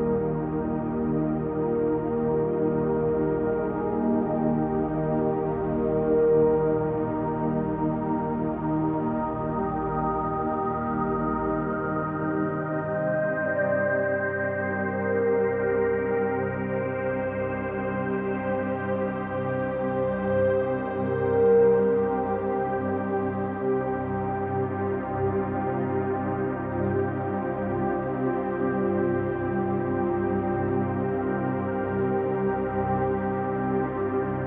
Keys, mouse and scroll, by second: 0.5 middle click, 1.5 KP_3, 2.5-3.2 scroll down 3, 3.5-4.2 scroll down 2, 4.2 e, 9.7 click, 10.0-10.3 scroll down 2, 10.3-10.7 middle drag, 11.3 e, 13.6 click, 13.9-14.3 scroll up 2, 14.4-15.8 middle drag, 16.3 s, 17.8 click, 18.1-18.6 scroll up 1, 18.6 middle click, 19.2 scroll up 1, 20.3 3, 20.7 click, 21.4 click, 22.2 shift+click, 22.7-23.0 scroll down 1, 23.3-23.7 scroll down 3, 23.7 scroll up 2, 24.5 scroll up 1, 24.6-25.3 scroll down 2, 25.3 e, 31.3 click, 32.3 s, 33.7 click, 34.0-34.4 middle drag.